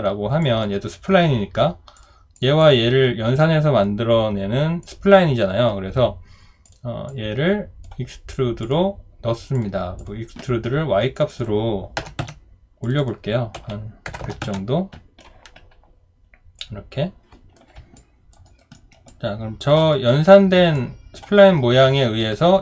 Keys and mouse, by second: 12.0 0, 12.2 Return, 13.5-14.4 typing, 14.4 Return, 18.0 alt+click, 18.4 alt+right click, 18.7 alt+middle click, 19.1 alt+click, 19.9 alt+right click, 20.7 alt+click, 21.4 alt+right click, 21.8 alt+middle click.